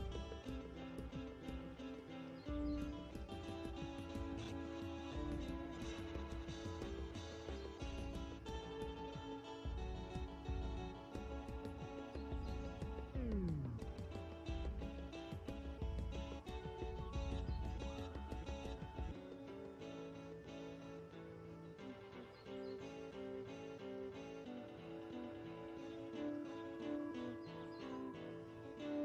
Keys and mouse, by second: 0.8 Tab, 1.8 shift+d, 2.0-3.1 drag, 2.3 Tab, 2.4 s, 3.2 click, 3.3 Tab, 7.9 x, 8.5-9.6 drag, 9.4 x, 9.8 shift+a, 11.9 Tab, 12.2 g, 12.9 Tab, 15.6 click, 16.3 KP_0, 16.4 KP_0, 20.1 z, 21.3 g, 22.1-22.4 drag, 24.9 z, 25.2-26.5 drag, 25.2 z, 27.4 shift+d, 28.5 shift+c.